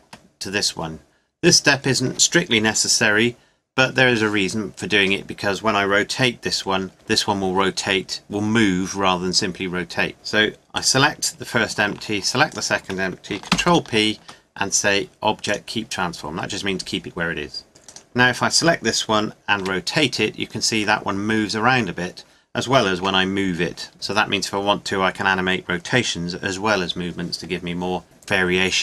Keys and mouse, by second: 10.8-14.3 drag, 13.5 ctrl+p, 17.9-19.5 drag, 19.6 r, 23.0 g.